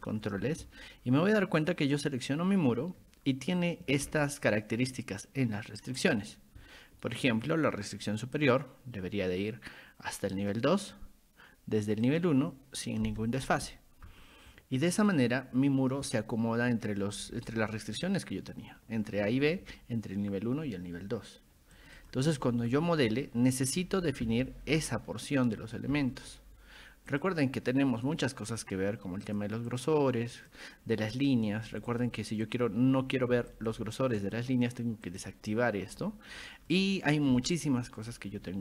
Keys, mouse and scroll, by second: 0.0 click, 0.7 scroll up 1, 2.0 click, 4.1 ctrl+1, 4.5 click, 5.2 ctrl+click, 8.4 click, 10.4 click, 12.1 click, 14.9 click, 17.2-18.1 middle drag, 17.2-17.5 scroll up 2, 21.8 click, 22.0 click, 23.1-23.6 scroll up 2, 23.8-24.8 typing, 24.8-25.1 scroll up 2, 25.1 scroll down 2, 27.1 click, 29.3 click, 29.7 click, 30.4 click, 31.9 click, 32.5 click, 33.5 click, 34.2 click, 35.1 click, 36.5 middle click.